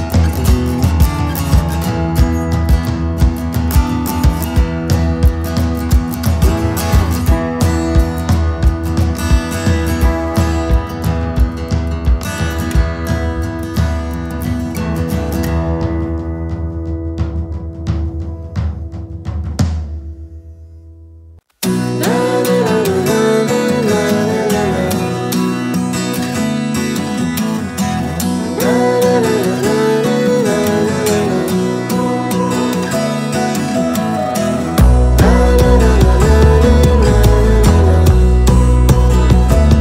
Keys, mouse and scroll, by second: 0.2 click, 2.4 Left, 4.5 click, 5.7 Left, 7.5 Down, 9.0 click, 10.8 alt+scroll up 1, 13.5 click, 27.2 Right, 30.1 Left, 31.0 Return, 32.3 alt+scroll down 1, 33.1-34.7 scroll down 1, 35.0-35.6 alt+scroll up 2, 36.2-36.7 scroll down 2, 37.4 click.